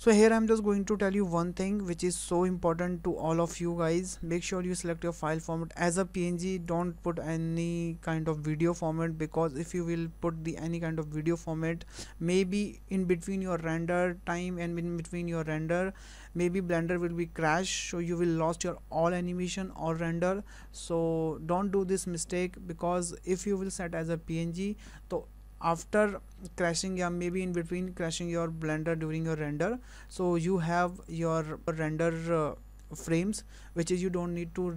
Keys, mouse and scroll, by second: 6.7 click, 9.7 click.